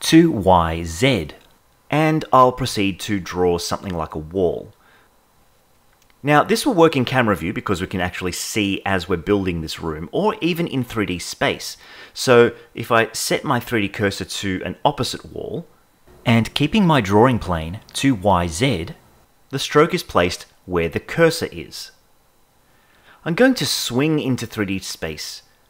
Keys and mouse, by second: 2.0 click, 2.8 click, 3.4 click, 4.0 click, 4.8 click, 5.1 click, 5.4 click, 5.7 click, 6.0 click, 6.3 click, 6.6 click, 6.9 click, 7.3 click, 7.9 click, 8.1-11.0 shift+middle drag, 11.4 shift+middle click, 12.8 KP_0, 14.7 click, 17.1 click, 18.2 click, 18.6 click, 19.0 click, 19.6-20.8 drag, 21.0 click, 21.2 click, 21.7 click, 22.1 click, 22.6 click, 23.0 click, 23.3 click, 24.0 click, 24.2 click, 24.4 click, 24.6 click, 24.9 click, 25.3 click.